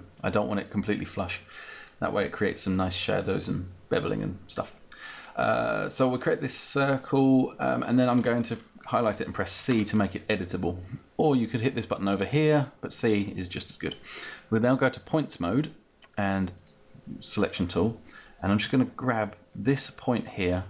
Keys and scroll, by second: 9.4 c, 9.9 c.